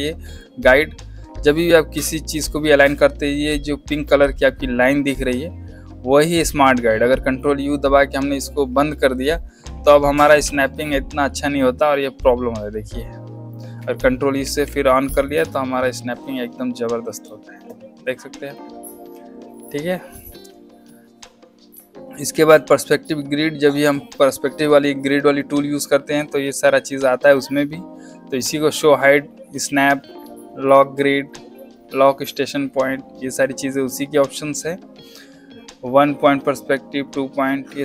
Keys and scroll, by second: 0.6 space, 10.2 ctrl+u, 14.4 ctrl+u.